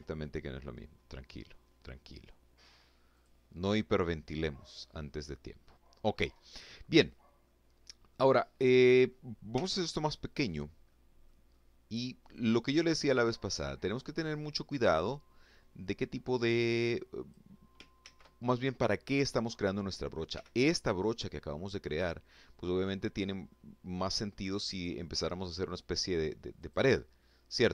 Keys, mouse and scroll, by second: 1.7 click, 4.6 scroll down 1, 5.0 click, 6.0 click, 7.3 click, 8.1 f, 9.0 click, 9.5 middle click, 10.1 scroll up 1, 10.9-16.1 drag, 16.6 ctrl+z, 18.9 f, 19.6 click, 20.6 click, 22.1-23.3 middle drag, 23.3 click, 24.1 click, 25.2 click, 25.8 middle click, 27.0 ctrl+z.